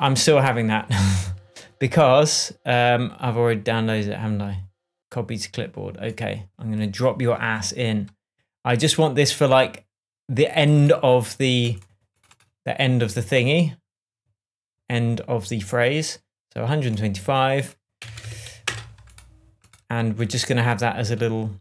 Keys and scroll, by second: 18.2-19.1 typing.